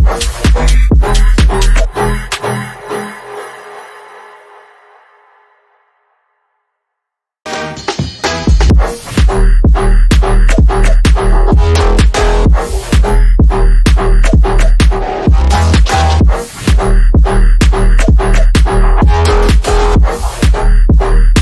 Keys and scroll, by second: 4.2 shift+F2, 4.7 Escape, 13.8 F3, 14.4 Escape.